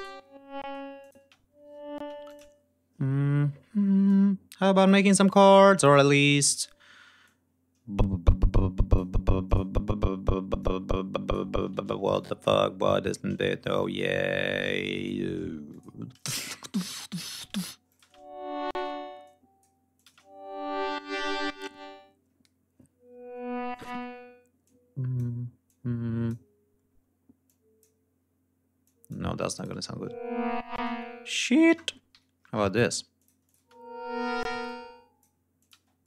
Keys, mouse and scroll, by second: 0.1 ctrl+scroll down 2, 0.5 ctrl+space, 0.9 ctrl+click, 1.2 ctrl+scroll up 2, 1.8 space, 2.0 e, 2.1 click, 3.2 d, 3.9 click, 5.7 ctrl+y, 6.0 ctrl+scroll up 2, 6.3 ctrl+click, 7.1-9.0 drag, 9.3 click, 10.4 click, 11.7 ctrl+y, 12.0 ctrl+click, 13.4 g, 13.6 click, 14.4 click, 15.4 e, 15.5 click, 16.4 shift+d, 16.7 shift+click, 17.7 click, 17.9 space, 18.5 space, 19.1 click, 19.8 click, 19.9 space, 21.1 ctrl+scroll down 2, 21.3 ctrl+scroll up 2, 23.7 space, 24.5 click, 25.5 click, 27.3 click, 28.7 click, 29.4 click, 29.6 space, 30.2 ctrl+scroll down 2, 30.6 ctrl+space, 31.9 alt+shift+Up, 33.0 click, 33.4 space, 34.2 space, 34.5 click, 35.4 click, 35.6 space.